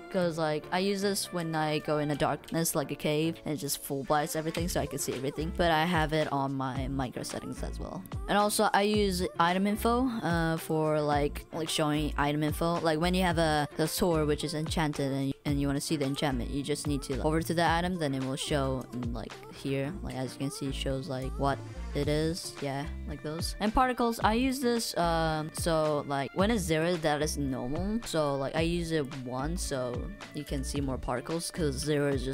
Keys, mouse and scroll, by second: 3.7 right click, 14.0 w.